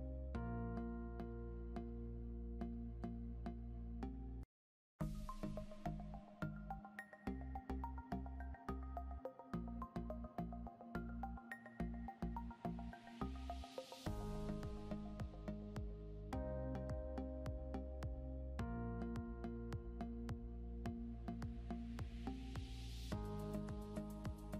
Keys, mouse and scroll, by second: 2.2 click, 4.8 click, 6.9 scroll down 1, 8.9 click, 10.7 ctrl+z, 13.3 click, 16.6 click, 19.2 click, 21.3 ctrl+Page_Down, 23.0 Down.